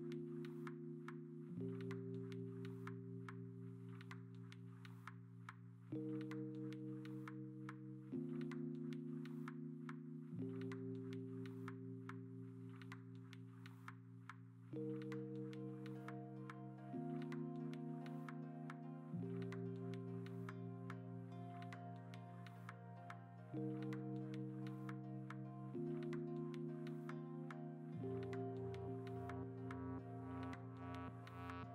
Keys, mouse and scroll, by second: 2.7 ctrl+z, 3.1 ctrl+z, 5.0 ctrl+z, 5.0 x, 7.9 ctrl+z, 7.9 x, 8.5 alt+BackSpace, 10.5-11.1 typing, 17.8 ctrl+d, 19.4 alt+BackSpace, 19.7 Escape, 21.2 ctrl+d, 21.3 ctrl+i, 21.8 ctrl+alt+z, 26.0 b, 26.4 x, 27.7 0, 29.1 ctrl+z, 29.2 x.